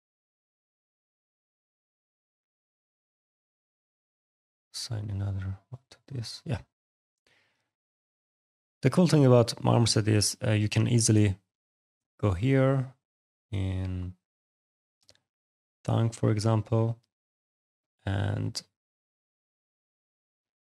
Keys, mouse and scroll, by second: 2.2 alt+click, 2.4 alt+right click, 3.2 click, 4.4 click, 5.3 click, 6.4 right click, 6.9 click, 7.3 middle click, 7.6 right click, 11.8 click, 12.8 click, 14.5 alt+click, 14.8 alt+right click, 16.1 click, 16.7 alt+click, 16.9 alt+right click, 17.5 middle click, 17.9 right click, 19.3 click.